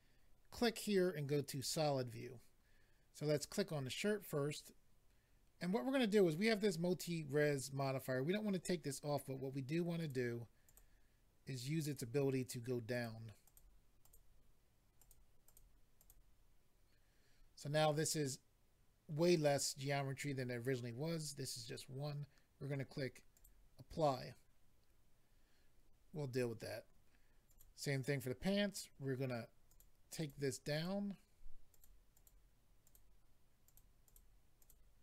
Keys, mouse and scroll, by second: 0.5 click, 0.6 click, 1.5 click, 1.6 click, 3.3 click, 10.0 click, 10.6 click, 11.9 click, 12.9 click, 13.4 click, 14.0 click, 15.0 click, 15.4 click, 15.5 double click, 15.9 double click, 23.3 click, 23.4 click, 27.5 click, 27.6 click, 29.6 click, 30.2 click, 30.7 click, 30.8 double click, 31.7 double click, 31.8 double click, 32.1 double click, 32.8 double click, 32.9 double click, 34.0 click, 34.1 click, 34.5 click, 34.7 double click.